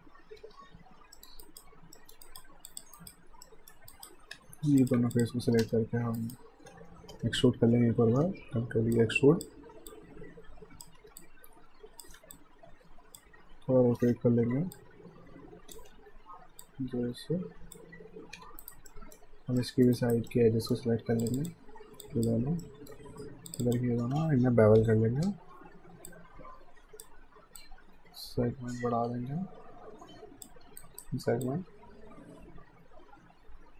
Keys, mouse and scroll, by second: 0.3 f, 1.2 alt+middle click, 1.4 alt+right click, 2.0 alt+middle click, 2.2 right click, 2.7 click, 3.0 right click, 3.4 middle click, 3.9 right click, 4.4 q, 4.8 click, 5.1 shift+click, 5.6 space, 6.2 alt+right click, 7.0 w, 7.7 ctrl+e, 9.0 click, 11.0 r, 11.2 click, 12.2 w, 12.3 click, 13.3 e, 14.8 click, 15.0-16.2 typing, 16.7 click, 18.4 q, 18.6 right click, 18.9 alt+middle click, 19.6 alt+middle click, 20.0 alt+right click, 20.3 alt+middle click, 21.2 click, 22.1 alt+click, 22.6 alt+middle click, 23.5 shift+click, 24.8 ctrl+b, 26.1 click, 30.8 alt+right click, 31.4 click.